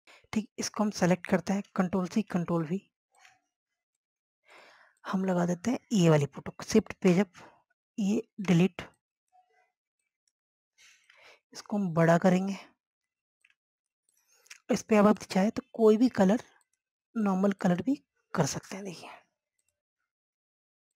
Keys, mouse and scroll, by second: 0.0 click, 2.0 scroll down 1, 2.4 click, 3.8 click, 5.1 scroll up 1, 6.3 shift+Page_Up, 7.4 click, 7.8 Delete, 8.2 click, 11.3 click.